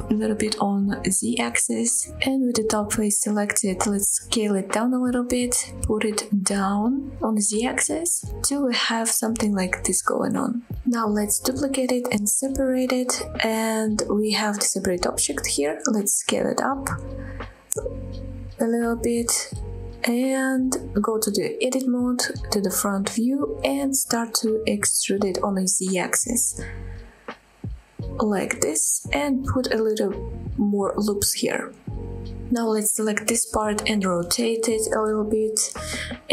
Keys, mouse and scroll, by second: 0.3 click, 0.4 middle click, 1.0 shift+middle click, 1.6 click, 2.3 click, 2.6 middle click, 2.9 click, 3.2 s, 3.6-4.5 scroll up 6, 4.9 click, 5.0 middle click, 5.5 scroll up 1, 5.7 middle click, 5.9 g, 6.2 z, 7.8 click, 8.0-9.1 middle drag, 9.4 scroll down 1, 9.7 middle click, 10.3 middle click, 11.0 middle click, 11.4 shift+d, 11.6 right click, 12.2 p, 12.8 Tab, 13.1-13.9 scroll up 3, 14.1 click, 14.5 click, 15.0 scroll down 1, 15.3 shift+middle click, 15.5 middle click, 15.9 s, 16.8-18.3 right drag, 18.3 s, 20.2 click, 20.4-20.8 middle drag, 20.9-21.4 shift+middle drag, 21.4 Tab, 22.0 KP_1, 22.3 scroll up 2, 23.0 e, 23.8 right click, 24.7 a, 25.3 e, 26.4 scroll down 1, 28.4 click, 28.6 scroll down 1, 28.9 shift+middle click, 29.6 ctrl+r, 31.7 right click, 32.2 scroll down 1, 32.5 shift+middle click, 32.9 scroll up 2, 33.2 click, 34.1 r, 34.9-36.3 scroll down 5.